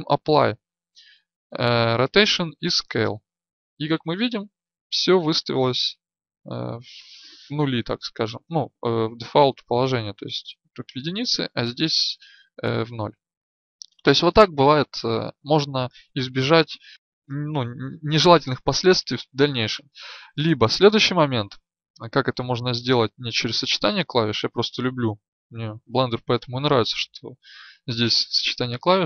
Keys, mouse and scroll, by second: 22.6 n, 23.6 right click.